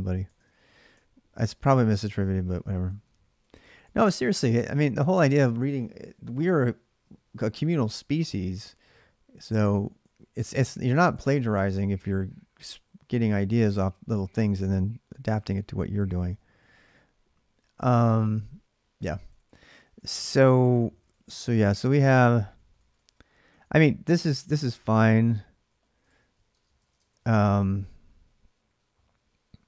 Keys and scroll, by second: 0.0-3.3 typing, 10.2-12.1 typing, 15.6-27.7 typing.